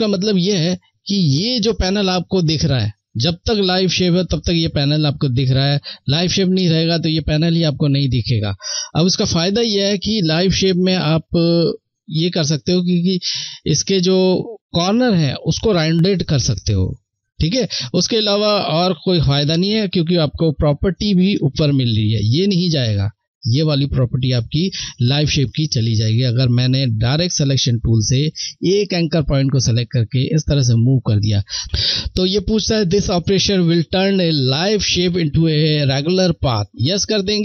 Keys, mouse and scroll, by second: 26.8 click, 36.2 click.